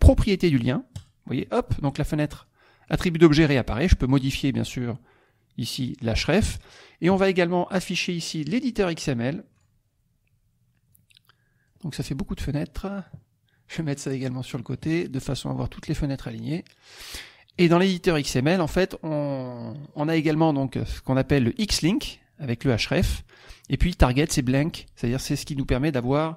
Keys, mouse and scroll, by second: 0.9 click, 2.4 click, 3.9 click, 6.4 middle click, 7.8 click, 9.5 click, 10.9 click, 12.0-13.2 middle drag, 13.9 click, 15.3 click, 16.3 click, 17.5 click, 18.3 click, 24.5 click.